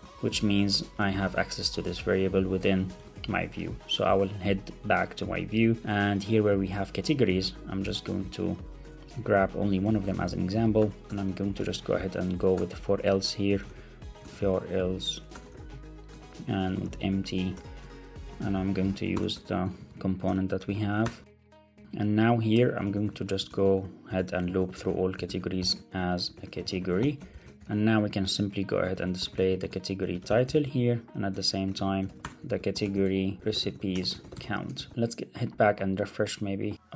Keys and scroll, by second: 0.0 alt+Left, 0.6 Escape, 1.0 alt+super+l, 1.1 super+s, 2.3 Left, 2.6 shift+super+Right, 3.0 super+c, 4.2 ctrl+Tab, 5.0 ctrl+Tab, 7.8 Down, 8.2 super+Left, 8.7 Up, 8.9 Down, 9.3 alt+Up, 9.7 super+x, 9.9 Up, 10.0 super+Right, 11.0 Return, 12.4 Return, 13.1 Right, 13.4 Left, 13.6 super+v, 14.1 super+z, 14.7 Right, 15.2 Return, 15.4 super+v, 16.0 Return, 17.3 Return, 17.8 Return, 18.2 super+z, 18.6 Left, 18.8 shift+super+Right, 19.2 Return, 20.7 shift+super+Left, 21.5 Return, 21.7 alt+super+l, 21.8 super+s, 22.7 Left, 22.8 Up, 23.0 super+Right, 23.3 Left, 27.2 alt+shift+Left, 27.5 super+c, 28.8 shift+super+Left, 29.3 super+v, 31.3 shift+Right, 31.7 super+v, 31.9 super+z, 32.2 alt+shift+Left, 32.4 super+v, 34.7 alt+super+l, 34.8 super+s.